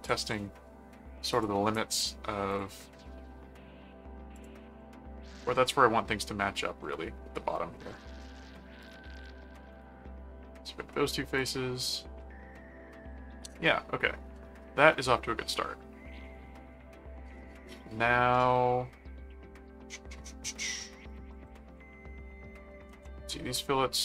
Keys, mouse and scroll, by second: 0.0 ctrl+click, 1.3 click, 2.5 click, 4.4 click, 8.8 click, 9.7 right click, 11.4 click, 13.1 middle click, 14.3-20.9 middle drag, 21.0 ctrl+click, 21.3 ctrl+Tab, 22.9 ctrl+Tab, 23.9 click.